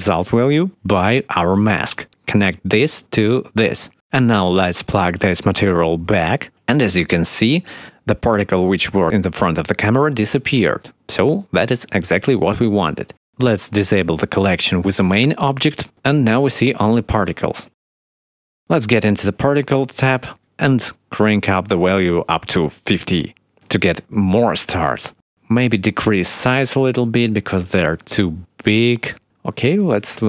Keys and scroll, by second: 16.7 space, 18.8 space, 23.8 5, 24.0 Return, 26.1 5, 26.2 Return, 28.4 ., 28.5 5, 28.7 Return.